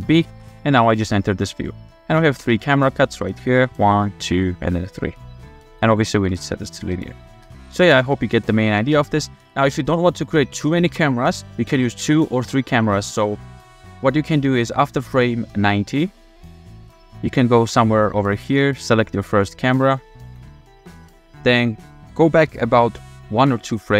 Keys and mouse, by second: 0.1 ctrl+b, 1.2-1.5 drag, 2.1 KP_0, 2.4 space, 5.5 space, 5.9-6.2 drag, 6.2 t, 7.1 click, 7.4-9.3 typing, 7.8 click, 9.0 click, 10.5 drag, 10.9 f, 12.7 shift+middle drag, 13.4-13.7 middle drag, 14.0 shift+middle drag, 16.1 middle click, 16.4-16.9 shift+middle drag, 17.4 shift+middle drag, 17.8-18.1 middle drag, 18.3-18.6 shift+middle drag, 18.9 middle click, 19.5 shift+middle click.